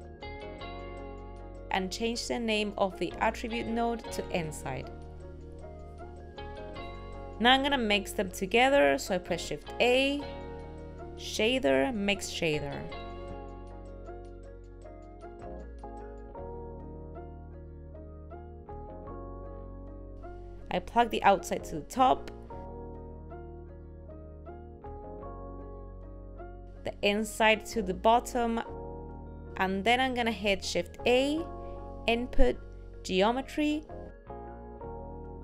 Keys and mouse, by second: 13.2 click, 16.6 click, 17.9 click, 21.6 click, 22.4 click, 28.2-29.2 drag.